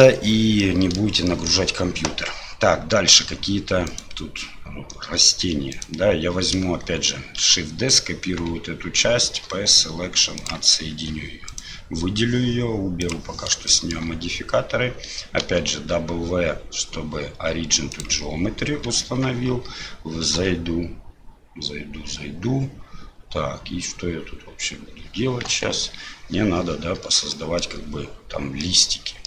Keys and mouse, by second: 0.6 middle click, 1.3 shift+middle click, 3.2 Tab, 3.9 click, 5.4 3, 5.7 click, 7.4 shift+d, 9.4 p, 10.9 Tab, 11.5 click, 13.7 shift+click, 15.4 w, 19.0 Tab, 20.4 a, 25.5 KP_1, 27.3 shift+click, 28.6 middle click.